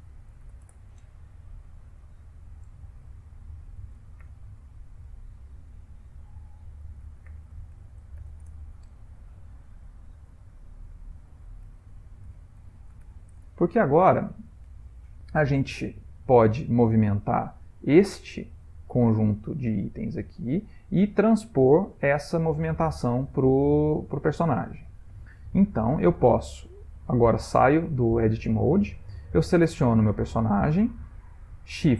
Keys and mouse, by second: 1.8 click, 3.2 F3, 6.1 F2, 9.6 click, 10.8 F2, 15.0 ctrl+middle click, 15.7 middle click, 19.4 middle click, 20.1 middle click, 20.3 middle click, 20.9 middle click, 24.0 ctrl+middle click, 24.8 shift+middle click, 26.2 Tab, 29.7 click.